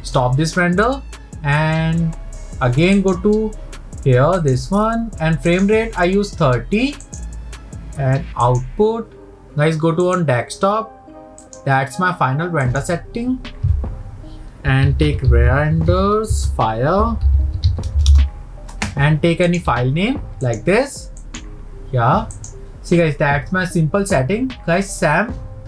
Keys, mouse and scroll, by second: 3.1 click, 7.2-21.5 drag.